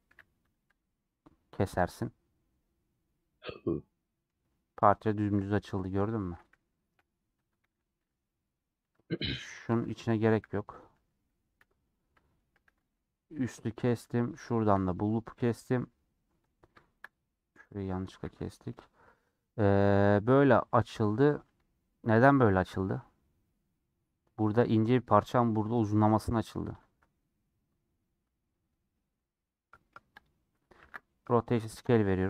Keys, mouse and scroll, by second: 0.1 a, 2.5-6.9 middle drag, 6.9 /, 7.4 Tab, 7.9-9.1 middle drag, 9.1 click, 11.5 /, 11.7-12.8 middle drag, 12.8 click, 13.4 middle click, 14.0 2, 14.5 shift+middle click, 15.4 ctrl+click, 15.9 a, 18.2 a, 19.8-20.8 scroll down 2, 20.8 a, 22.4 Tab, 27.3-30.0 middle drag, 30.0-32.2 drag.